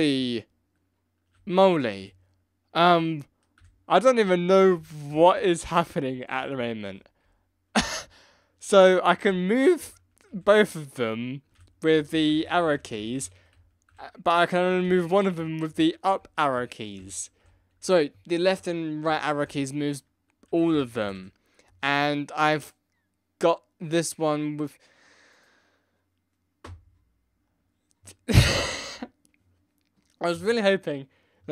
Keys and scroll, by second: 0.1 Left, 1.5 Right, 1.9 Left, 2.8 Right, 3.5 Left, 4.2 Down, 4.7 Up, 5.3 Down, 6.0 Up, 6.5 Down, 7.2 Up, 8.0 Left, 8.7 Right, 9.1 Right, 9.2 Left, 10.3 Left, 11.5 Right, 11.9 Left, 12.3 Left, 12.7 Left, 13.2 Right, 13.5 Down, 13.8 Left, 14.3 Up, 14.8 Down, 15.3 Up, 15.7 Down, 16.2 Up, 16.5 Down, 16.9 Up, 17.4 Left, 17.7 Right, 18.4 Left, 19.0 Right, 20.4 Right, 20.7 Left, 21.0 Left.